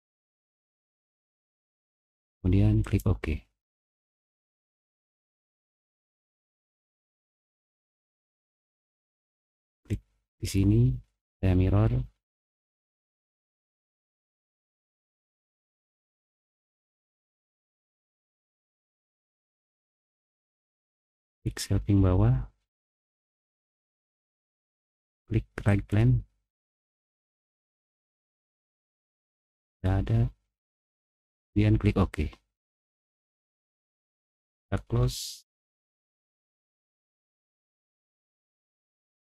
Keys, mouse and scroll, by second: 2.8 click, 5.5 click, 9.7 click, 16.1 click, 17.2 click, 21.3 click, 26.5 middle click, 27.0 middle click, 27.3 middle click, 27.7 middle click, 28.3 middle click, 28.8 middle click, 31.2 click, 33.3 click, 34.4 click, 35.8 middle click, 36.8-37.5 scroll down 6, 37.5-38.9 middle drag, 38.9-39.2 scroll down 3.